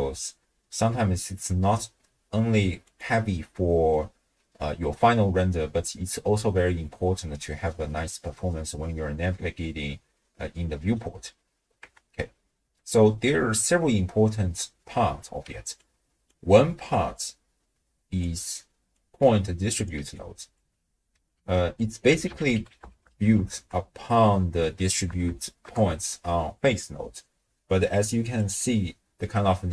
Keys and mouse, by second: 2.9 click, 7.0-11.1 middle drag, 11.9 KP_0, 14.4 middle click, 15.8 click, 17.1-18.2 drag, 18.9 click, 19.9 d, 20.2 click, 20.5 d, 20.6 d, 20.7 d, 21.4 ctrl+a, 25.3 Down.